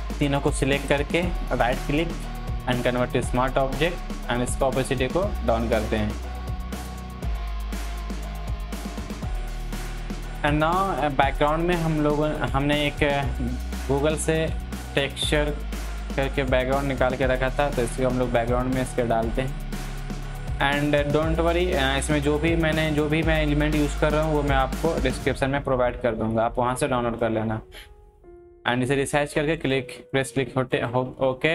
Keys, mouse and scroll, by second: 1.4 right click, 2.9-9.3 drag, 10.3 click, 13.4 click, 17.2 ctrl+t, 17.8-24.0 drag, 24.0-29.6 alt+drag.